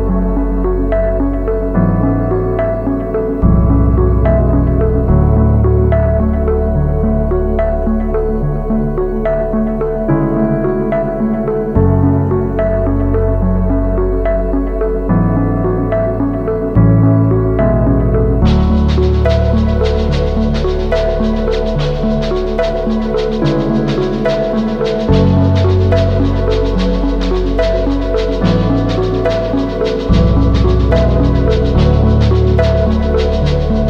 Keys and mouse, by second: 1.0 shift+drag, 1.7 g, 4.2 click, 5.4 g, 6.9 shift+click, 7.5 Tab, 8.5 KP_Decimal, 9.4 Tab, 9.5-10.5 drag, 10.9-12.6 drag, 12.6 Tab, 13.0 a, 13.3 ctrl+s, 13.7-14.4 drag, 15.0-15.6 drag, 15.7 shift+click, 16.3-16.7 drag, 17.1 shift+drag, 17.5 Tab, 18.1 shift+click, 20.0 ctrl+KP_1, 21.3 shift+drag, 21.8-24.3 typing, 24.7 click, 25.5-27.0 drag, 27.2 ctrl+z, 29.9 a, 30.2 3, 32.8 click, 33.7 ctrl+z.